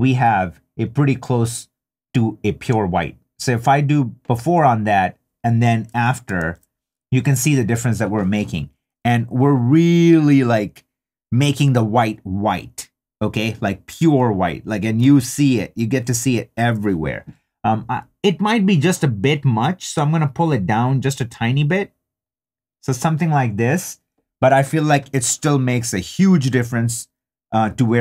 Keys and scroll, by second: 6.4 super+z, 14.8 shift+super+z.